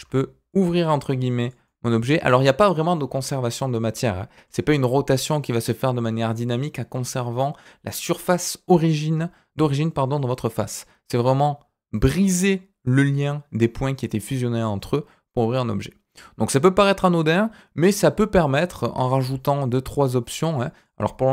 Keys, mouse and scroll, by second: 0.8 g, 1.6 middle click, 3.8 scroll down 2, 3.9 middle click, 4.4-7.7 scroll up 2, 11.1-12.5 middle drag, 14.1-18.7 middle drag, 18.7 scroll up 1, 19.0 shift+middle click, 20.0 click, 20.5-21.3 drag.